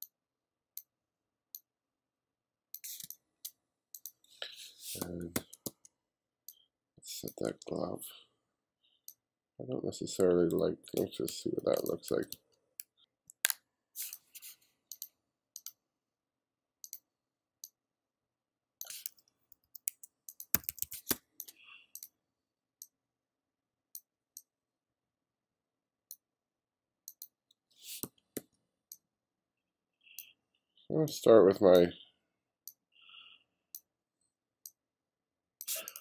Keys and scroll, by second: 3.1 space, 3.6 space, 5.1 b, 11.3-13.8 typing, 19.6 2, 20.6 2, 21.1 space, 28.1 b.